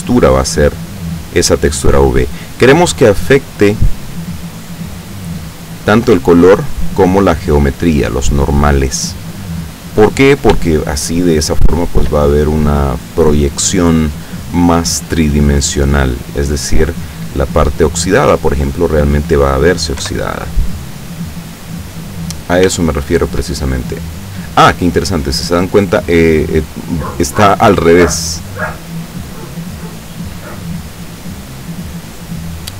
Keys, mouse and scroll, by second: 4.4-6.0 drag, 7.6 click, 9.4-10.6 scroll down 1, 10.6 shift+scroll down 1, 10.8-12.2 shift+middle drag, 20.1 F12, 22.9 shift+middle click, 23.7 shift+scroll up 2, 27.8 Escape, 32.6 middle click.